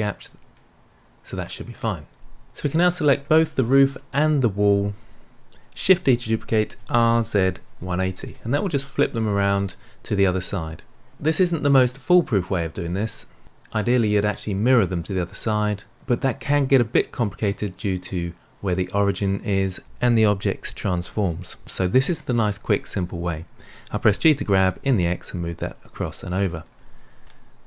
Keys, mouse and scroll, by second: 2.6 click, 3.5 shift+click, 5.8 shift+d, 23.7 g, 27.2-27.6 middle drag.